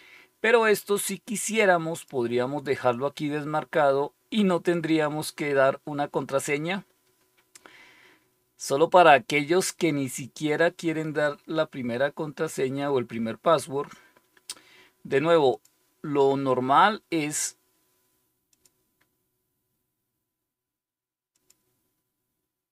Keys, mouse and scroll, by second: 1.8 click, 15.4 click, 18.4 click, 18.9 click, 21.2-22.2 drag.